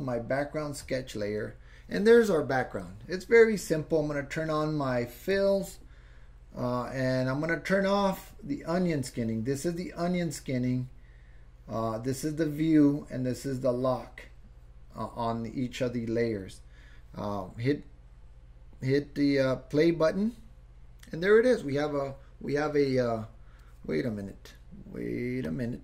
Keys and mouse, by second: 0.8 click, 5.3 click, 8.3-8.9 drag, 19.9 click, 25.6 click.